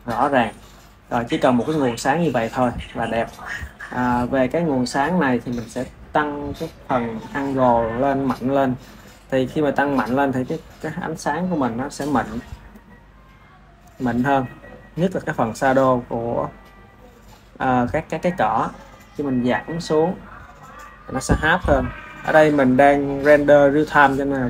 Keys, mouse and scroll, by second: 4.1 ctrl+s, 5.2 click, 7.5-10.5 drag, 11.4 click, 12.3-17.9 ctrl+middle drag, 19.3-24.4 drag.